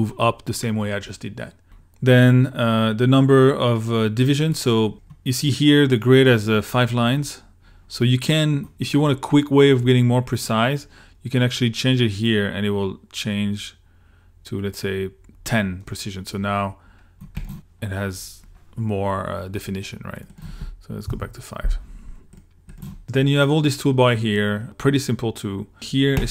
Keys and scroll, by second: 21.1 5, 22.1 Return.